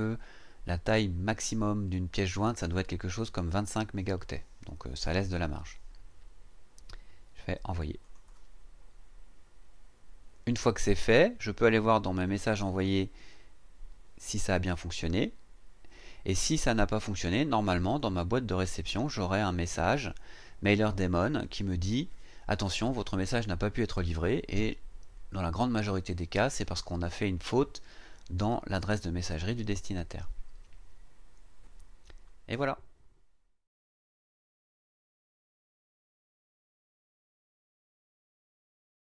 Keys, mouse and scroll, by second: 8.0 click, 12.5 click, 17.8 click.